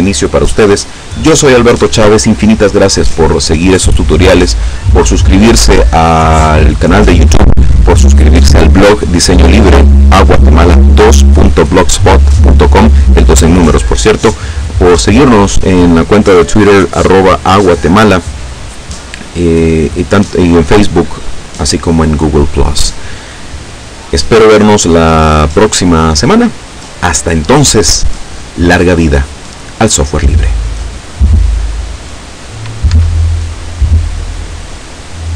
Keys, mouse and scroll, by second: 32.9 Escape, 34.5 right click.